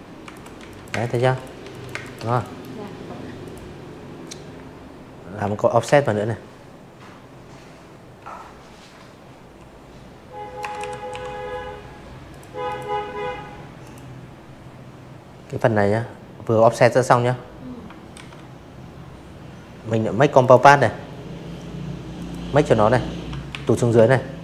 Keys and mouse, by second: 0.4 click, 2.7 ctrl+q, 9.2 click, 9.6 click, 10.7 click, 13.6 click, 15.1 ctrl+z, 17.3 click, 19.1 click, 20.4 ctrl+shift+[, 20.8 v, 21.3 click, 21.8 click.